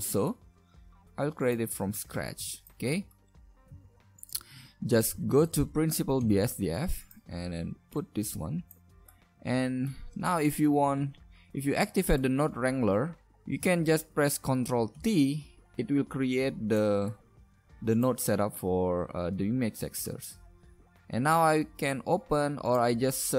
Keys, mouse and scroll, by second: 0.9 right click, 0.9 click, 0.9 a, 0.9 g, 1.9 a, 3.8 shift+a, 8.3 click, 10.4-10.9 right drag, 15.0 ctrl+t, 16.2-16.8 drag, 17.4 g, 17.9 click, 18.2 a.